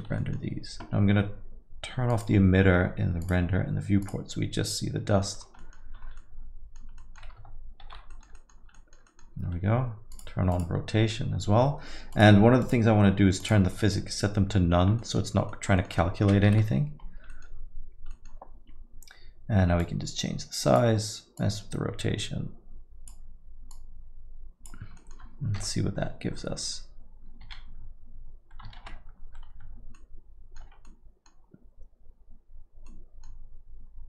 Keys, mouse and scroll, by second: 0.0 scroll, 0.2 middle click, 1.3 scroll down 1, 2.1-2.7 scroll down 4, 5.6 middle click, 6.0 scroll up 2, 6.2 middle click, 7.0 middle click, 8.1 middle click, 8.5 scroll down 1, 8.8 middle click, 15.0 middle click, 15.8 middle click, 16.5 Left, 17.3 middle click, 26.4 0, 28.9 alt+z, 30.0 middle click.